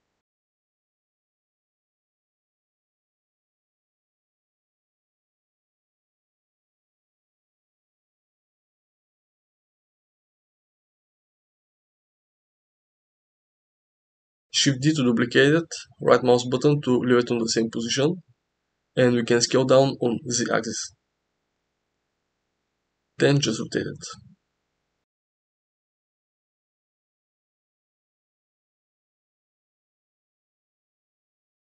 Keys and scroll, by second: 2.1 s, 2.7 g, 5.8 s, 7.6 s, 8.7 g, 10.3 s, 12.2 g, 15.8 shift+d, 17.1 s, 18.2 s, 18.8 z, 18.9 z, 21.3 r, 21.4 r, 30.9 r, 31.2 r.